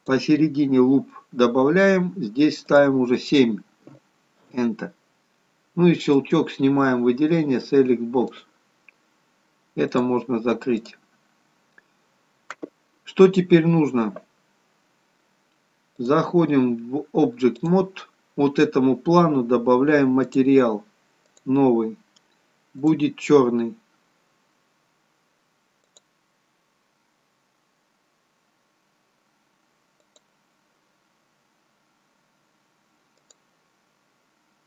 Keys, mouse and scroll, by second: 0.0 click, 6.1 click, 9.6 click, 9.9 click, 10.7 click, 15.9 click, 20.3 click, 21.2 click, 27.6 click, 33.2 click.